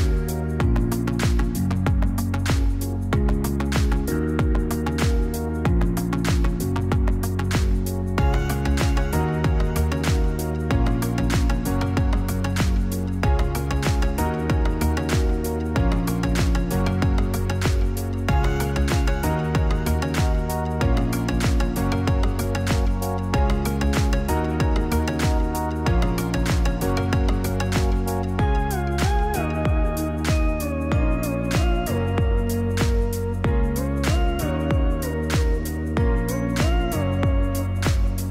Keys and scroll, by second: 0.9 ctrl+c, 1.2 ctrl+v, 4.6 F9, 11.8 0, 18.9 0, 22.2 0, 28.1 0, 29.4 typing.